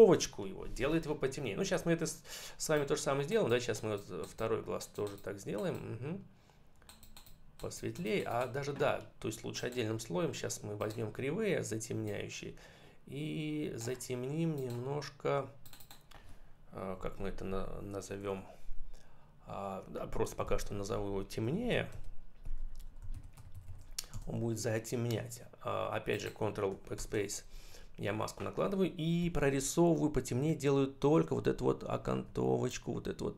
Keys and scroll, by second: 20.3 shift+n, 21.6 shift+t, 22.6 BackSpace, 23.0 shift+v, 23.4 shift+t, 24.0 Return, 26.8 ctrl+BackSpace, 29.1 [, 31.3 ], 31.9 [.